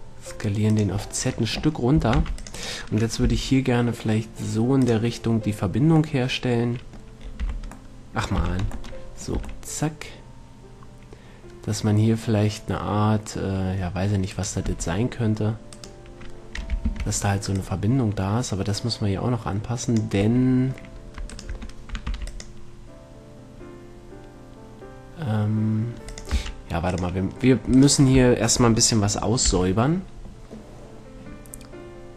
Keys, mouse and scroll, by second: 0.2 middle click, 1.3 click, 2.3 a, 2.5 c, 3.5 g, 5.3-7.5 drag, 7.5 middle click, 7.7 z, 8.7 z, 8.9 Tab, 9.7 a, 14.6-17.9 right drag, 14.9 Tab, 17.1 ctrl+l, 17.9-19.7 drag, 20.7 middle click, 21.6 Tab, 21.6-24.7 right drag, 21.8 Tab, 22.3 ctrl+r, 23.4-25.2 drag, 26.6-28.3 drag, 26.6 x, 28.0-29.7 right drag, 29.9 n.